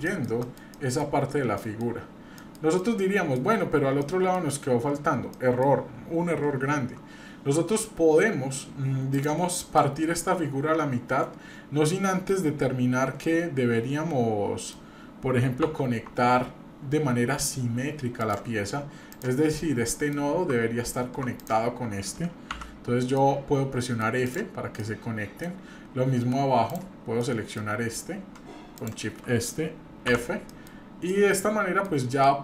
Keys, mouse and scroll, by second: 0.1 shift+middle click, 0.4 middle click, 0.7 middle click, 1.2 scroll down 1, 1.6 middle click, 2.0-2.3 scroll up 1, 2.4 middle click, 2.7 middle click, 4.0 middle click, 4.6 scroll up 1, 5.4 shift+middle click, 5.7 shift+scroll down 1, 9.1 click, 9.8-12.3 middle drag, 12.8 scroll up 1, 13.2-14.7 middle drag, 15.0-15.3 scroll up 1, 15.6 Tab, 16.1 Tab, 18.2 click, 19.1 click, 19.5 middle click, 21.4 shift+click, 22.5 f, 23.2 middle click, 24.3 click, 24.8 middle click, 25.5-26.5 scroll down 1, 26.7 click, 27.3 middle click, 28.7 shift+click, 30.1 f, 30.5 middle click, 30.7-31.1 scroll down 2, 31.1 middle click, 32.2 middle click.